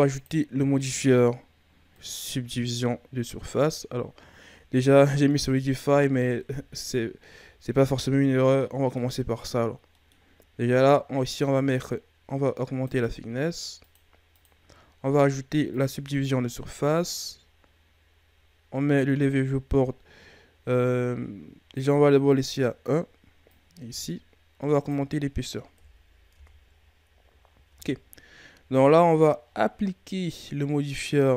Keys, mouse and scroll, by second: 0.0-3.1 drag, 4.8 scroll down 1, 4.8-5.4 middle drag, 5.4-6.4 scroll up 4, 6.4 KP_3, 8.5-11.2 middle drag, 11.2-16.5 drag, 16.5-19.5 middle drag, 21.7-25.7 drag, 25.7 KP_1, 26.3 Tab, 26.8-27.2 scroll down 5, 27.2-27.6 scroll up 5, 27.6 Tab, 29.4-31.3 scroll up 7.